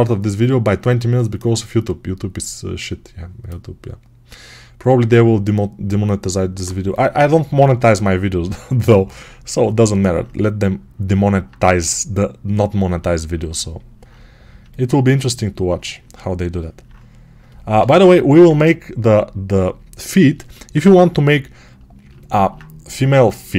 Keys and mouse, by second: 11.0-23.5 alt+right drag.